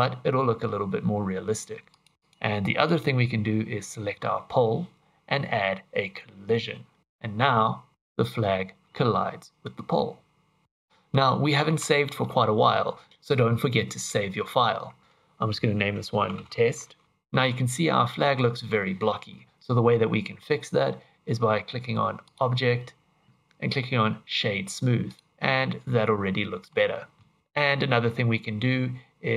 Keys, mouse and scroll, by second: 1.9 click, 2.2 click, 2.8 click, 7.0 click, 7.9 click, 9.9 middle click, 11.9 shift+middle click, 17.8-18.2 scroll up 3, 22.2 click, 25.3 middle click, 27.4 click.